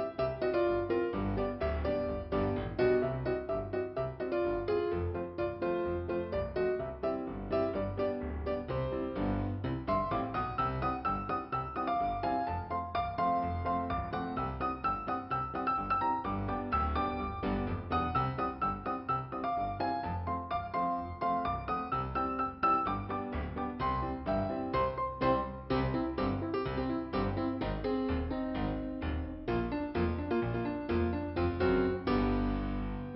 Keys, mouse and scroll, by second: 0.0-0.4 scroll down 1, 3.3 click, 4.6 click, 5.2 scroll down 1, 5.8 right click, 8.0 scroll up 2, 9.0 click, 10.2 click, 14.0 click, 16.2 click, 17.4 click, 26.1 click, 26.3 click, 27.7 right click, 28.9 click, 29.7 scroll up 1, 31.2 click, 32.8 click.